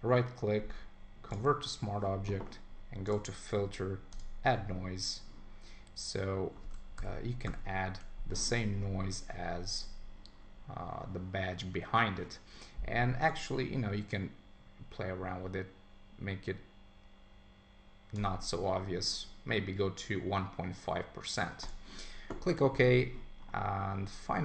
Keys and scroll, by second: 7.0 super+=, 22.7 super+s.